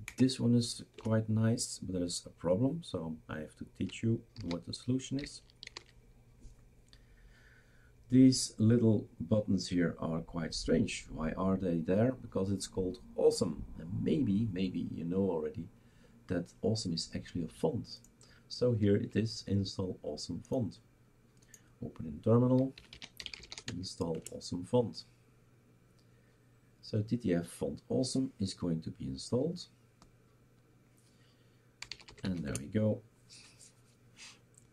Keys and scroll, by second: 0.1 Down, 0.9 BackSpace, 4.4 ctrl+s, 5.7 shift+super+r, 22.6-23.9 typing, 24.1 Return, 31.6-32.7 typing.